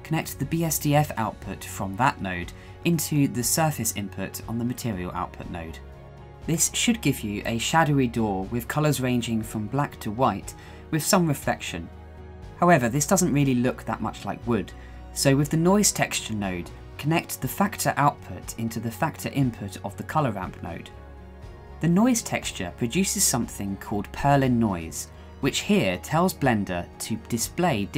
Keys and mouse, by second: 0.5-3.1 drag, 6.8-8.2 shift+middle drag, 13.9-15.6 drag.